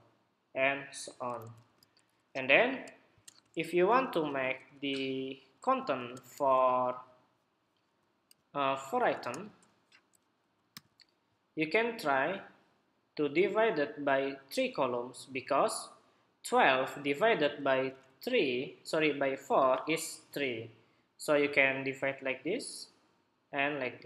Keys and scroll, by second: 1.4 super+-, 8.0 super+k, 9.8 ↶, 10.5 super+j, 17.6 super+=, 19.8 super+t.